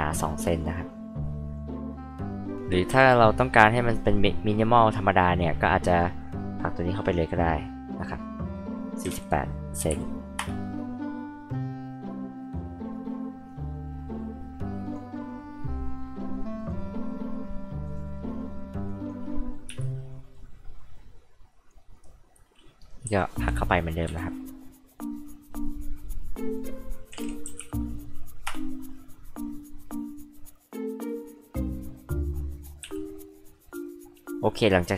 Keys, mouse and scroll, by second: 0.6 click, 1.8-2.5 scroll down 2, 2.5-3.5 scroll up 2, 3.6-4.1 scroll down 2, 6.0-8.1 drag, 9.0-10.4 typing, 11.2-11.6 scroll down 2, 12.5 click, 13.2 click, 14.1-14.5 scroll up 2, 14.8 click, 16.6 click, 17.8 click, 18.8 click, 19.6 e, 20.1 click, 20.8 click, 21.5 click, 24.1 p, 24.2-26.5 drag, 27.1-28.1 typing, 28.4 Return, 29.4 click, 30.5 click, 33.0 click, 34.5 click.